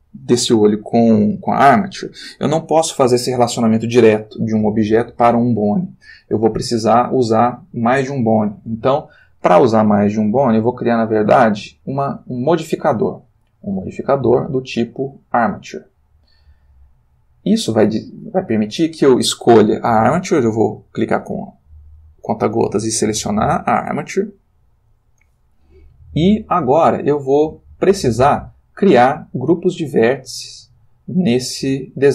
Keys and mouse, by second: 11.2 click, 13.9 click, 15.3 click, 19.3 click, 23.0 click.